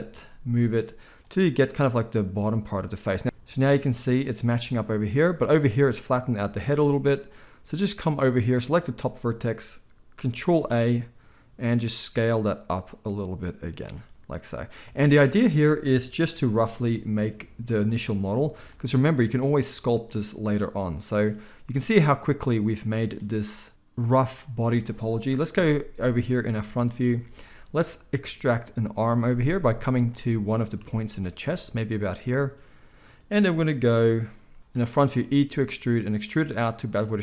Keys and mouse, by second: 0.2 g, 3.2 z, 3.6-13.8 drag, 10.5 ctrl+a, 13.8-29.9 middle drag, 16.4 g, 25.5 KP_1, 27.1 z, 29.9 click, 30.0-34.6 middle drag, 34.6 click, 34.7-37.2 middle drag, 35.2 e.